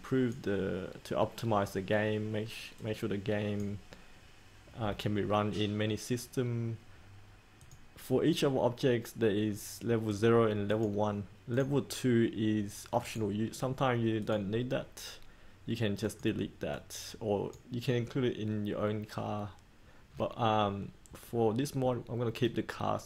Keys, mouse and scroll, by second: 12.9 right click, 14.2 click.